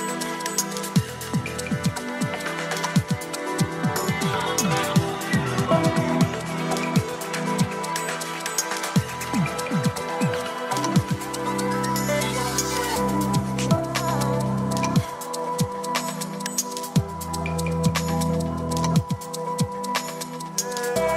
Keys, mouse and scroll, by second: 0.9 drag, 2.3-2.9 drag, 6.9-8.5 drag, 10.1-12.4 drag, 14.0 drag, 15.4 click, 17.4-18.4 scroll down 2, 19.6-20.3 scroll up 3, 20.3 scroll up 2.